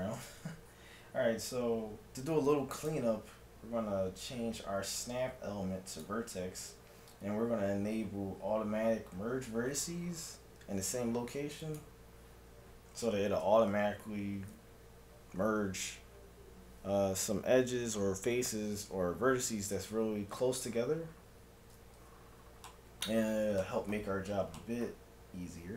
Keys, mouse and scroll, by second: 2.9-4.6 drag, 11.7-13.4 drag, 22.7-24.1 middle drag.